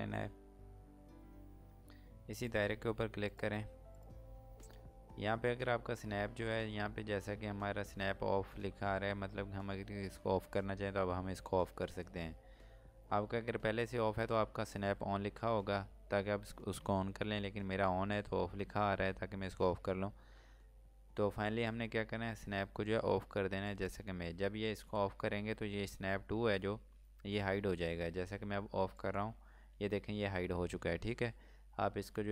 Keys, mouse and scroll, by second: 2.2 click.